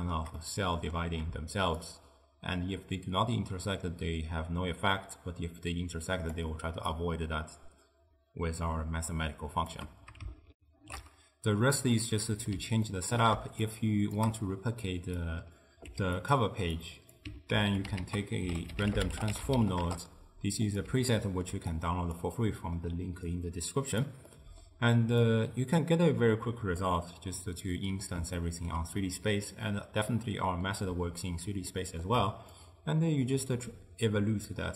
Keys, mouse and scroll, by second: 1.9-5.0 shift+drag, 7.0-10.1 shift+drag, 10.6 ctrl+alt+shift+q, 12.0-13.7 middle drag, 13.7 shift+right click, 15.3 click, 15.9 g, 16.9 click, 17.6 ctrl+x, 18.1 ctrl+a, 21.1-21.8 ctrl+middle drag, 21.8 click, 22.5-23.4 middle drag, 23.4 click, 24.4-25.3 middle drag, 25.3 drag, 26.9-32.6 middle drag, 32.6-34.7 shift+drag.